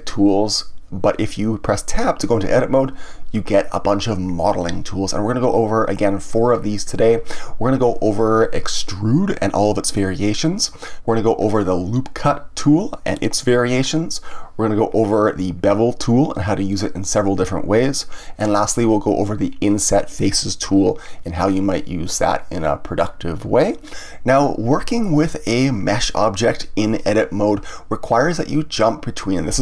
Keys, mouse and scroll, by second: 1.9 Tab.